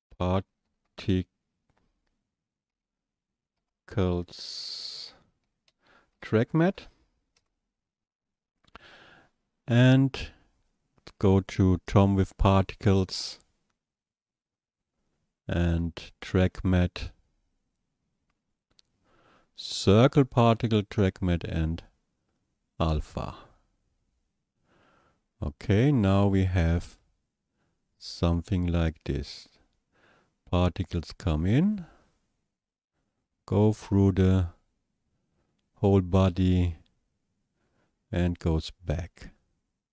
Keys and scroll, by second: 0.0-1.4 typing, 2.7 i, 5.7-7.4 typing.